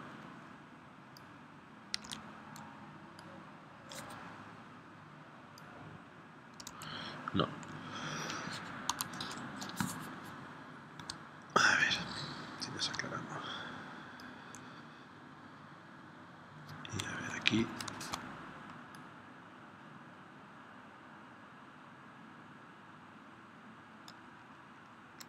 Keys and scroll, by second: 2.0 super+z, 6.6 super+z, 8.9 a, 17.9 shift+c.